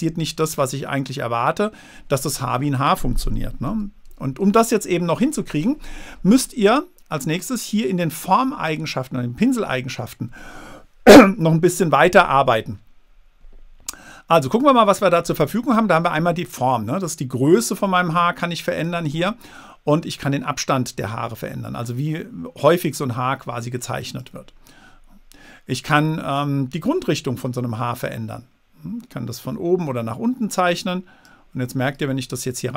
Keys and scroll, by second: 4.0 super+z.